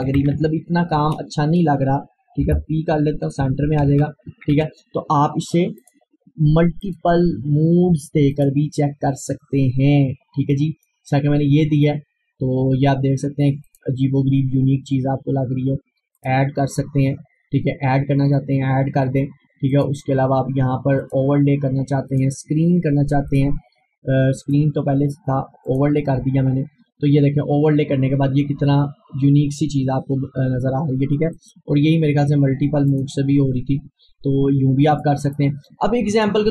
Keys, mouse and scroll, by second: 5.8 click, 9.9 scroll up 1, 13.7 click, 16.2 click, 19.7 click, 27.8 scroll down 1, 29.1 scroll up 1, 31.4 click, 35.5 scroll down 1, 36.2 click.